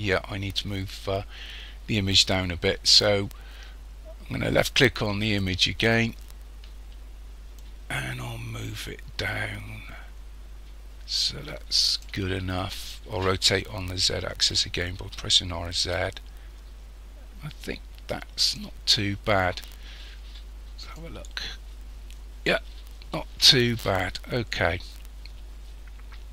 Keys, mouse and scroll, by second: 5.3 click, 7.6 click, 15.0 r, 20.9 click, 24.4 scroll down 1.